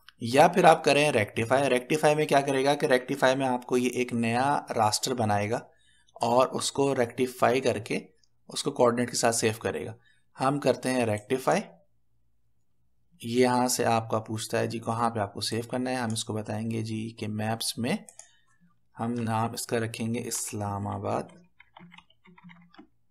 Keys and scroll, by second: 20.3-23.1 typing.